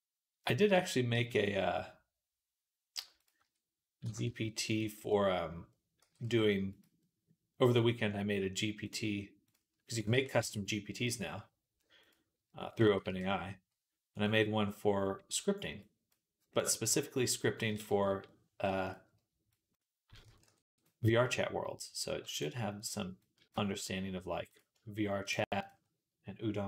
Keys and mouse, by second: 0.6 Tab, 1.0 g, 3.0-8.7 middle drag, 3.3 Tab, 3.9 e, 5.8 g, 8.7 click, 9.3-11.8 middle drag, 10.0 e, 11.8 click, 11.9-15.6 middle drag, 12.6 a, 12.9 e, 15.6-18.7 drag, 17.9 /, 18.7 middle click, 19.4-20.7 drag, 20.3 ctrl+r, 21.8 click, 22.1 shift+middle click, 22.2 shift+click, 22.2 shift+middle click, 23.1-24.4 drag, 24.4 shift+middle click, 25.0 click, 25.1 shift+middle click, 25.4 shift+click, 25.5-26.6 shift+middle drag.